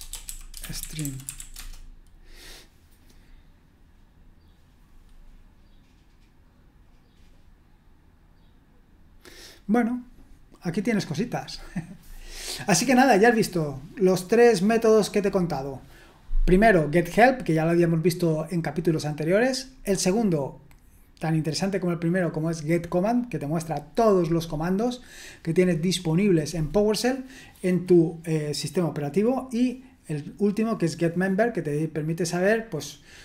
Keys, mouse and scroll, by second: 0.0-1.9 typing, 13.0-13.4 scroll up 2, 13.4-14.0 scroll down 1, 14.0 scroll down 1.